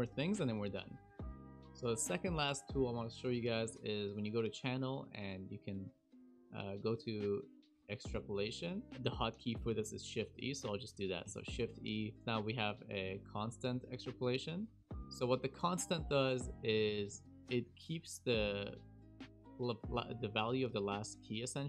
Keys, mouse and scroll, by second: 11.2 shift+e, 14.9 shift+e, 15.6 click, 15.9 click.